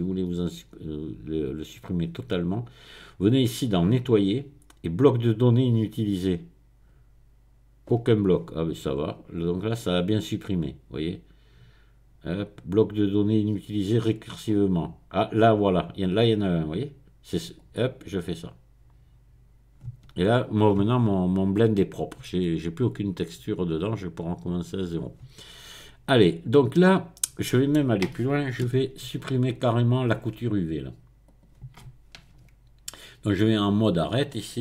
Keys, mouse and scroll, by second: 1.6 click, 5.9 click, 9.5 click, 14.3 click, 17.6 click, 24.2-25.3 drag, 25.9 click, 26.7-28.1 middle drag, 28.1-28.7 scroll up 1, 28.7 Tab, 28.7-29.0 scroll up 1, 31.3 click.